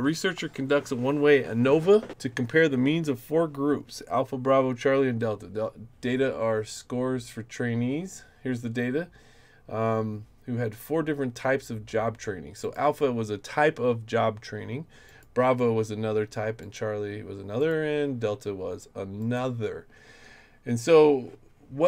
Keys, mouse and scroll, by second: 12.6 click, 15.1 click, 16.6 click, 17.6 click, 19.2 click.